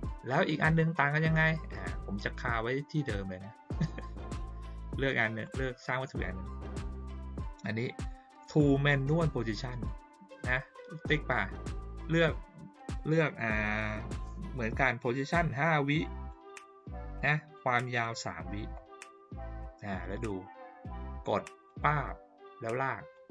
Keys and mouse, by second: 5.4 click, 10.4 click, 15.9 click, 16.8 click, 17.5 click, 21.6 click, 23.1 click.